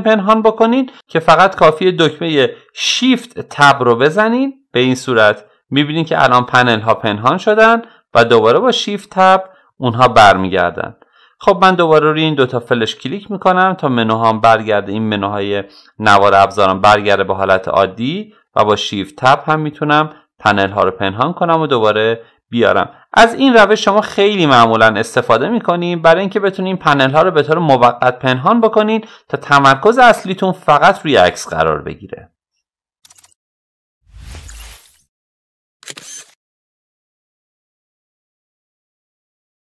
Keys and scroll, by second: 2.6 shift+Tab.